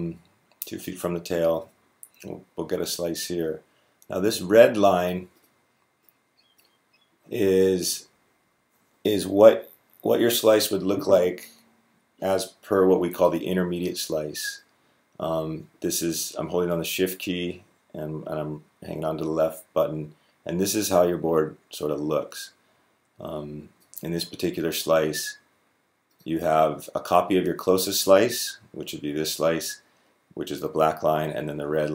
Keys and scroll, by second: 7.6 Down, 7.8 Down, 7.9 Down, 8.1 Down, 8.2 Down, 8.3 Down, 8.6 Down.